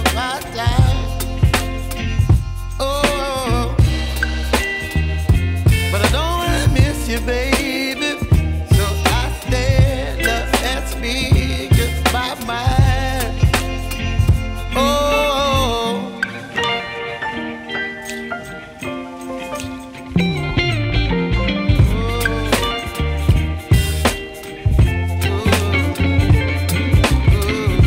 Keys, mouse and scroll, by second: 2.5-3.4 scroll down 1, 3.4 ctrl+s, 3.7-5.6 scroll down 1, 5.6 s, 8.5-9.9 scroll down 6, 9.9 ctrl+z, 10.9 s, 12.8-13.7 scroll down 5, 13.7-14.2 middle drag, 14.2-14.7 scroll down 12, 15.3 ctrl+s, 16.2 KP_0, 16.7-18.2 scroll up 5, 19.2 click, 20.4 click, 21.6-21.9 drag, 21.9 scroll down 4, 23.3-27.1 drag.